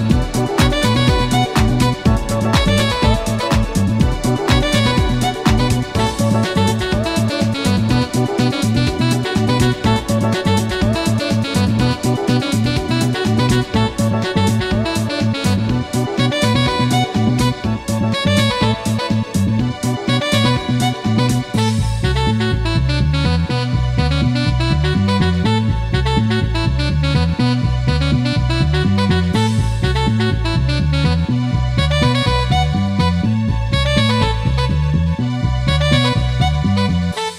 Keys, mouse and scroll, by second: 0.1 f, 0.4 0, 2.0 0, 2.0 6, 2.2 Return, 3.9-4.6 scroll down 2, 4.8-5.6 shift+middle drag, 6.1-7.4 shift+middle drag, 7.4-8.2 shift+scroll up 2, 8.9 a, 10.8 shift+click, 12.1 click, 13.1 shift+middle click, 13.7 shift+scroll down 1, 15.1-16.5 shift+drag, 17.5 scroll down 1, 18.1-18.8 middle drag, 18.9 a, 19.2 b, 19.4-20.2 drag, 20.5 g, 21.0 click, 21.8 click, 23.0 scroll down 1, 23.9 scroll down 1, 25.1 click, 26.2 click, 27.2 click, 28.5 click, 30.0 click, 32.0 click, 32.8 click, 34.1 click, 35.1 click, 36.4 scroll up 1.